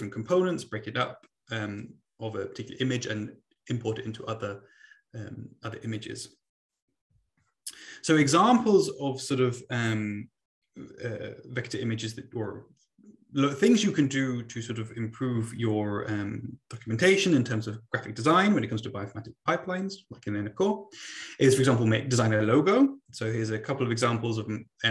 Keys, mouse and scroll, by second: 8.6 Right.